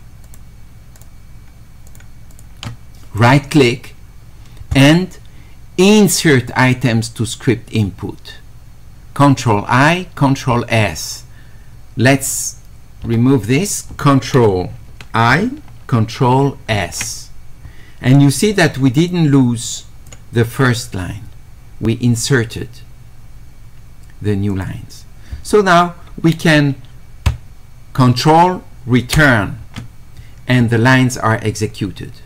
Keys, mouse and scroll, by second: 0.2 ctrl+click, 1.0 Escape, 1.9 ctrl+click, 2.3 ctrl+click, 3.2-4.4 right drag, 16.8 s, 19.1 click, 20.6 click, 24.5 click.